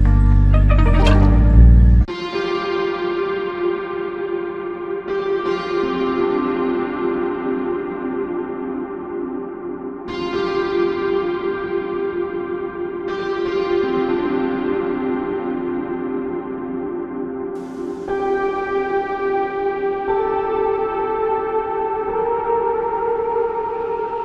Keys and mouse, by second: 4.2 f, 6.4 double click, 22.5 double click.